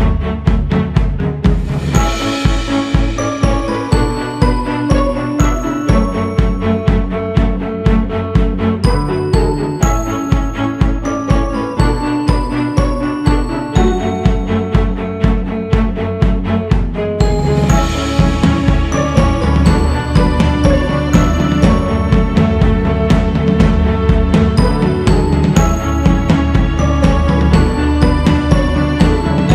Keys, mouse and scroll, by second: 0.6-1.1 scroll down 1, 1.3 click, 2.0-2.4 scroll up 2, 3.1-12.3 drag, 12.3-13.1 scroll down 2, 13.7 click, 14.5-15.0 scroll up 3, 15.0-25.0 drag, 25.0-25.8 scroll down 4, 25.8 click, 27.0-27.4 scroll up 1, 27.4-29.5 drag.